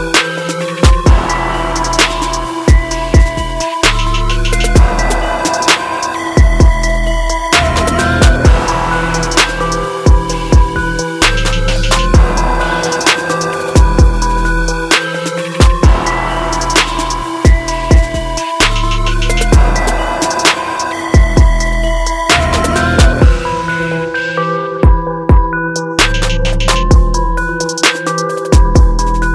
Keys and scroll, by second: 16.0 ctrl+j, 21.7 ctrl+alt+z.